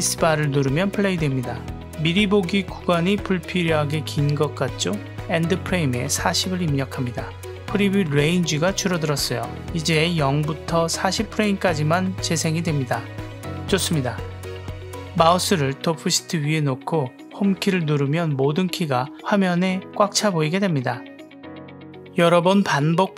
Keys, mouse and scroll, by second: 0.9 space, 1.4 shift+Left, 2.2 space, 4.1 space, 7.1 click, 10.5 click, 11.3 shift+Left, 11.7 space, 14.1 space, 17.5 Home, 21.3 shift+middle click, 22.2 shift+Left, 22.4 space.